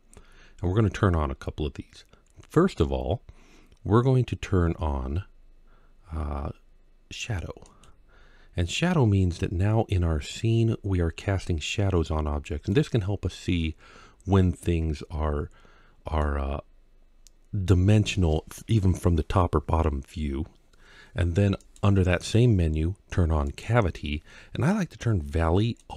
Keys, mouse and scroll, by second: 8.7-12.5 middle drag, 13.1-13.8 scroll up 1, 13.8 scroll down 1, 14.2-16.0 middle drag, 21.4-25.9 drag.